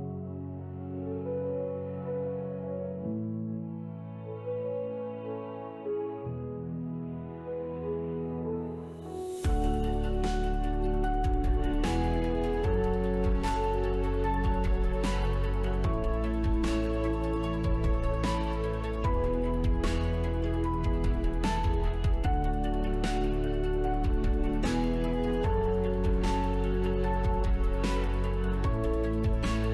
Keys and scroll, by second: 10.0 Escape, 12.2 shift+w, 23.9 Return, 26.0 c, 27.9 s, 28.5 Return, 29.1 Delete.